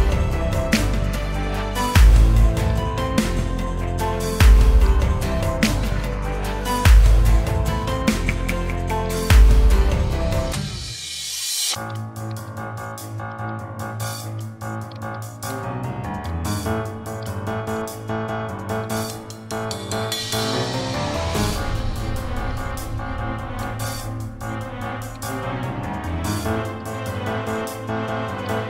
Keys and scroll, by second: 1.9 ctrl+z, 7.4 ctrl+z, 11.8 a, 14.8 a, 15.6 ctrl+z, 16.4 a.